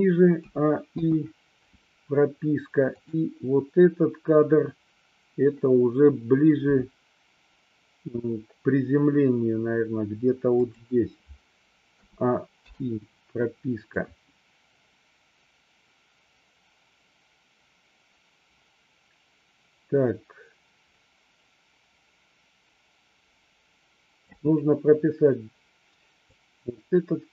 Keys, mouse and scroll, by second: 0.5 a, 1.0 i, 3.0 click, 6.8 g, 10.7 click, 12.2 a, 12.7 i, 14.0-24.4 drag, 26.4-27.3 drag.